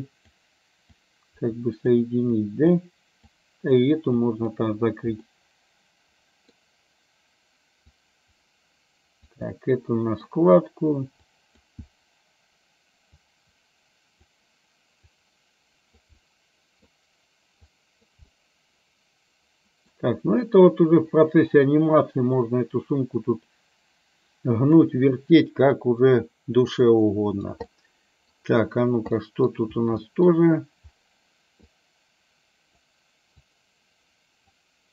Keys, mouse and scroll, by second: 1.1-2.2 drag, 2.5 click, 3.4 click, 4.3 click, 5.3-6.5 middle drag, 7.9-9.4 drag, 9.5 middle click, 11.2 click, 13.3-14.4 drag, 15.3 click, 16.4 middle click, 17.7 click, 18.3-20.0 middle drag, 22.5-24.9 drag, 27.0 click, 27.8 middle click, 29.3 middle click, 30.0 middle click, 31.7-32.9 drag, 33.5-34.6 drag.